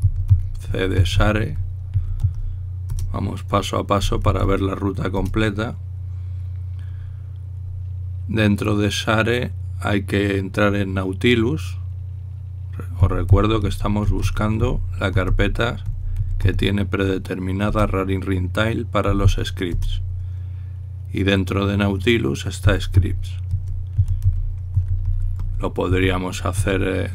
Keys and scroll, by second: 0.0-5.9 typing, 13.5-17.7 typing, 18.3 Return, 19.5-20.3 typing, 20.5 Return, 22.6-27.1 typing.